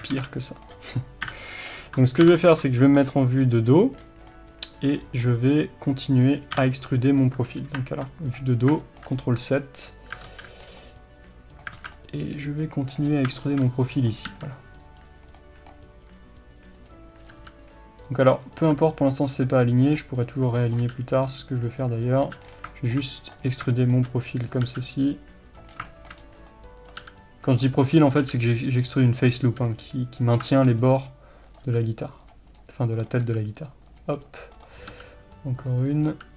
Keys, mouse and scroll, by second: 0.2 alt+a, 1.3 KP_7, 2.3 ctrl+KP_7, 3.1-3.4 scroll down 1, 3.4-4.0 scroll up 1, 4.0-4.3 scroll down 1, 5.6 scroll up 1, 6.6 KP_7, 7.7 ctrl+KP_7, 8.7-10.3 scroll up 2, 10.3 alt+z, 10.7 scroll down 1, 11.8 alt+z, 13.1 scroll up 2, 14.0 click, 14.4 f, 15.4-16.9 middle drag, 16.1 g, 17.2 click, 17.4 f, 18.4 click, 18.7 f, 20.0 middle click, 20.7 click, 20.9 f, 22.1 click, 22.3 f, 23.5 scroll down 1, 23.7 shift+middle click, 24.5 click, 24.7 f, 25.8 scroll down 1, 25.9 shift+middle click, 26.2-26.8 scroll up 1, 26.8 click, 27.1 f, 28.1 click, 28.3 f, 29.3 click, 29.6 f, 30.4 click, 30.5-31.5 shift+middle drag, 30.9-31.5 scroll up 2, 31.5 click, 31.7 f, 32.6 click, 33.3 f, 34.2 click, 34.6 click, 35.0 f, 35.9 click, 36.2 f.